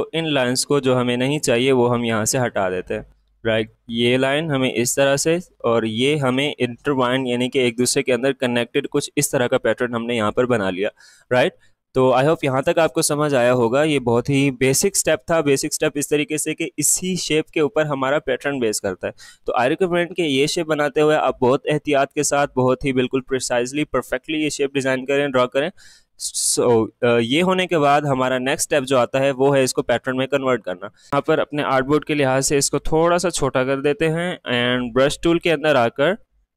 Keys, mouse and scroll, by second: 2.9-5.0 drag, 24.8 alt+click, 26.2 alt+scroll up 1, 27.8-31.0 drag, 31.0-32.3 drag, 32.3-35.4 drag.